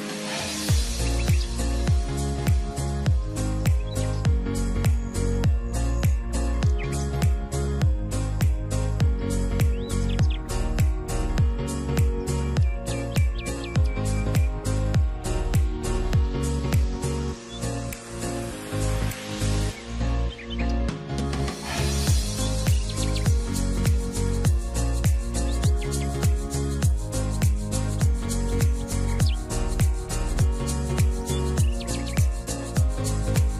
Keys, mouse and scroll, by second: 1.2 double click, 18.6-23.2 drag, 20.6-23.2 scroll up 2, 27.1 5, 27.2 Tab, 27.4 5.